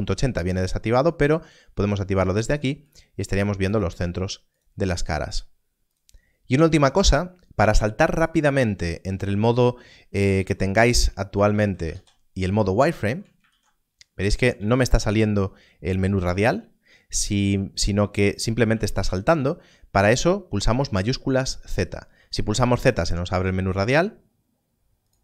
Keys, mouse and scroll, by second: 2.4 click, 10.1-11.8 typing, 13.0 shift+z, 13.4 shift+z, 14.2 shift+z, 14.6 shift+z, 18.6 shift+z, 18.8 shift+z, 19.1 shift+z, 25.0 right click.